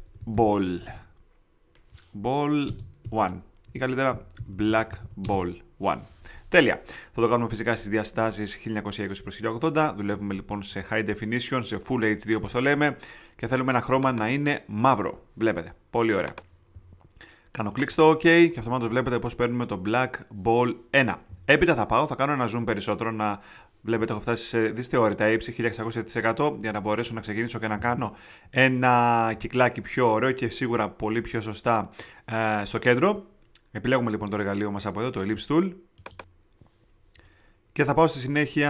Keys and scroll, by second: 0.0-1.2 typing, 2.6 space, 3.0 i, 3.6 Up, 4.1-5.5 typing.